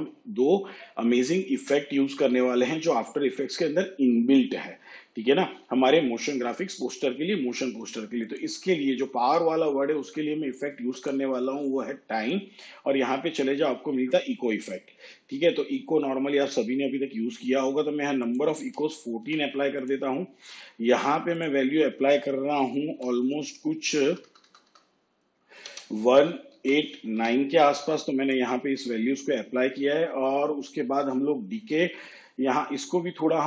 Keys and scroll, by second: 18.7 1, 19.3 4, 22.9 Right, 24.1 BackSpace, 25.7 1, 26.6 8.